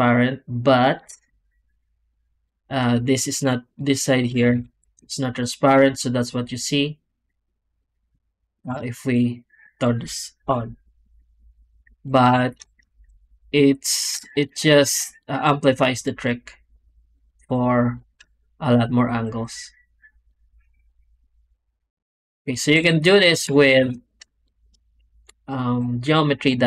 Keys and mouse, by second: 0.7 click, 1.2 m, 3.3-4.2 d, 3.6 click, 4.5 alt+shift+z, 7.7 drag, 8.5 d, 8.7 click, 9.1 d, 9.8 click, 10.3 m, 12.8 alt+shift+z, 14.1 shift+drag, 14.9 drag, 22.1 click, 22.6 z, 23.6 ctrl+space, 24.3 shift+drag.